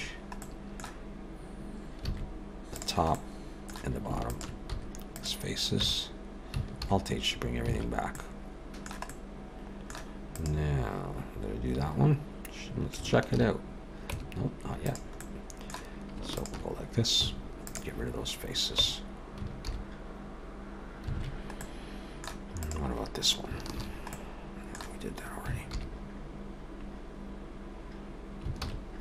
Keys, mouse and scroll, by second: 0.4 middle click, 2.1 alt+a, 2.8 click, 3.1 middle click, 4.3 shift+click, 4.7 x, 5.8 Tab, 6.8 alt+h, 7.7 alt+a, 8.1 middle click, 9.1 middle click, 10.3 click, 13.3 shift+h, 14.1 Tab, 14.9 click, 15.2 middle click, 16.3 shift+click, 17.2 x, 18.8 Tab, 19.7 alt+h, 21.2 alt+a, 21.6 middle click, 22.5 click, 23.8 shift+h, 24.1 middle click, 25.7 shift+h, 28.6 alt+a.